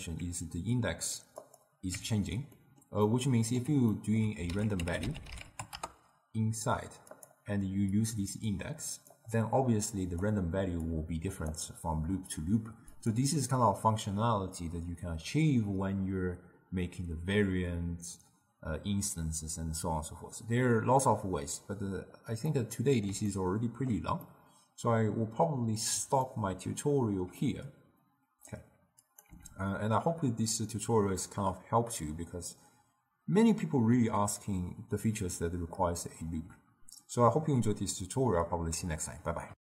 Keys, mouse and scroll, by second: 1.5 click, 2.0 Tab, 2.7-4.6 middle drag, 4.6 ctrl+a, 8.1 click, 10.3 drag, 13.0-16.1 drag, 22.6-29.1 middle drag, 29.1 click, 29.4 x.